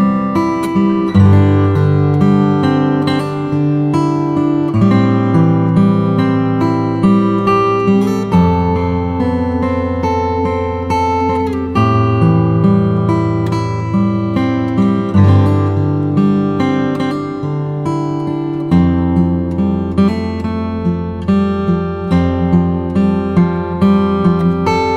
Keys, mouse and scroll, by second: 3.5 right click, 4.4 scroll up 2, 5.6 click, 6.0-7.2 drag, 8.1 click, 10.4 drag, 11.9 click, 12.6-13.9 drag, 14.9-16.4 middle drag, 16.4 click, 18.9 click, 20.1-21.7 drag, 22.8 KP_1, 23.3 shift+a.